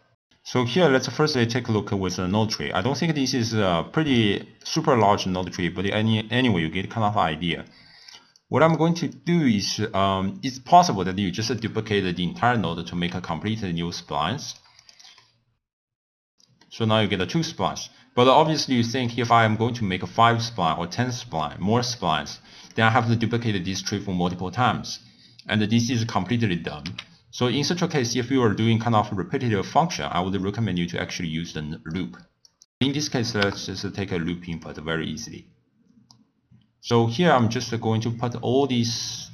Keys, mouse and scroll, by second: 0.3 scroll down 5, 0.5-0.8 scroll up 2, 0.8 scroll down 1, 0.9 scroll up 1, 1.3-1.9 scroll down 2, 1.9-3.5 middle drag, 3.5 click, 4.6 click, 5.4 click, 6.3-8.3 middle drag, 8.3 click, 9.1 click, 10.8 click, 13.3 shift+d, 14.8 click, 15.1 middle click, 15.6 ctrl+a, 15.8 click, 15.9 middle click, 16.0 shift+d, 16.1 click, 16.6-18.6 middle drag, 18.6 scroll down 2, 18.8-19.3 scroll up 3, 19.3-19.8 scroll down 4, 21.3 click, 27.1 x, 27.7 middle click, 28.5-29.0 scroll up 2, 29.6 scroll up 2, 29.8-30.3 scroll down 1, 31.9 click, 32.6 o, 38.6 drag.